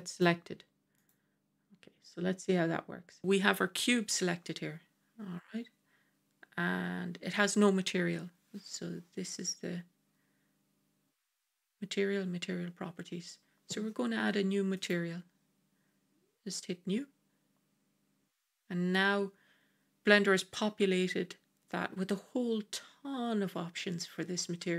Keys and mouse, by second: 17.6 click.